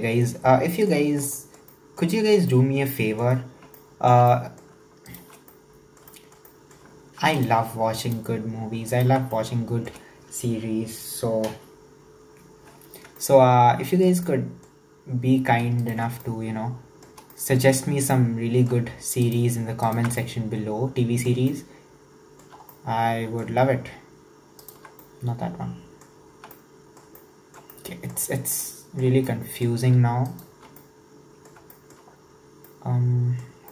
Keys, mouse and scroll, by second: 1.0 scroll up 1, 1.4-3.5 shift+middle drag, 3.5 scroll up 1, 3.8-5.1 shift+middle drag, 5.1 alt+shift+right click, 5.5-7.3 middle drag, 7.3 alt+shift+right click, 8.0 alt+shift+right click, 8.9 alt+shift+right click, 9.3-12.4 shift+middle drag, 13.2-15.8 shift+middle drag, 15.8 alt+shift+right click, 16.3-17.7 shift+middle drag, 17.7-18.1 scroll up 1, 18.1-19.2 shift+middle drag, 19.2 alt+shift+right click, 19.9 alt+shift+right click, 20.2-24.6 middle drag, 24.6 alt+shift+right click, 25.0-28.5 shift+middle drag, 28.5 scroll down 1, 28.6-30.3 shift+middle drag, 30.3 alt+shift+right click, 30.8-32.4 middle drag, 32.4-32.7 scroll down 1, 32.7-33.5 middle drag, 33.5 scroll down 1.